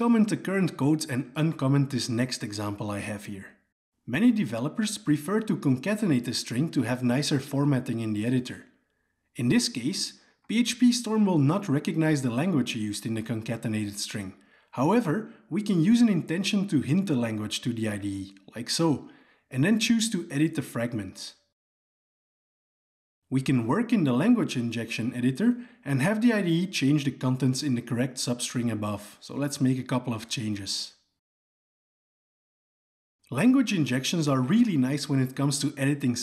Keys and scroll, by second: 1.0 ctrl+/, 1.3 ctrl+/, 14.7 alt+Return, 15.8 alt+Return, 20.8 alt+Return.